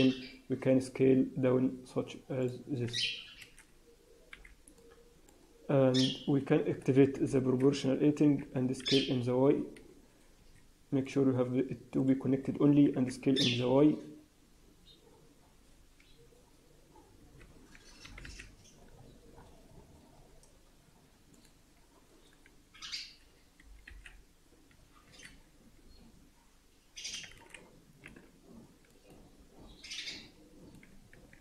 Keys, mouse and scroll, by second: 3.3 alt+a, 4.2 b, 7.0 o, 8.2 s, 11.0 click, 12.8 s, 18.0 g, 23.5 g, 27.2 alt+a, 28.0 b, 29.5 b.